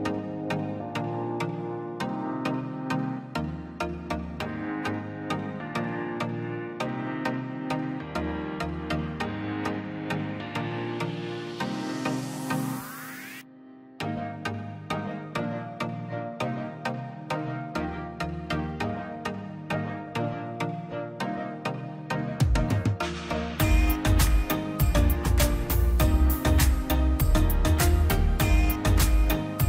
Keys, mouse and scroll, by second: 2.1 click, 3.6-4.4 scroll down 2, 3.9 click, 4.4 middle click, 4.6 scroll up 1, 5.0 scroll down 1, 5.1 middle click, 5.7 click, 6.8-7.1 scroll up 1, 7.5 click, 8.5-9.0 scroll up 1, 9.0 click, 9.3-10.1 scroll down 1, 10.8-11.1 scroll up 1, 11.8 click, 12.6 scroll down 1, 13.1-15.2 drag, 15.2 scroll down 1, 15.7-16.9 drag, 16.9 scroll down 1, 20.3-22.1 drag, 22.1 scroll, 22.7-24.2 drag, 24.2 scroll up 1, 25.2 click, 26.0 scroll up 1, 26.5 click, 26.9-27.4 scroll down 1, 27.7 scroll up 1, 28.2 click, 28.8 scroll down 1, 29.4 click.